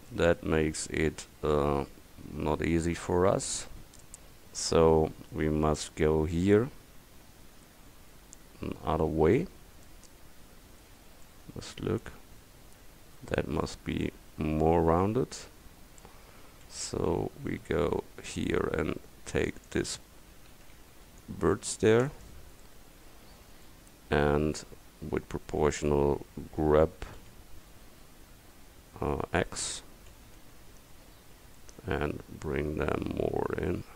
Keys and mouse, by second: 1.6 middle click, 5.6 middle click, 11.0 Tab, 15.0 Tab, 17.6 c, 20.6 click, 20.6 a, 21.0 c, 22.2 click, 27.3 g, 30.2 g.